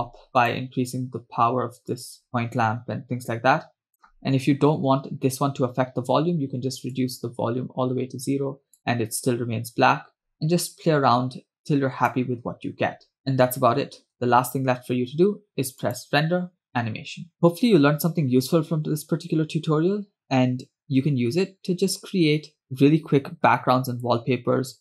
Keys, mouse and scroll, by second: 0.4 click, 2.2-4.1 drag, 7.0-8.9 drag, 10.3-12.4 drag, 13.2 space, 16.1-17.3 drag.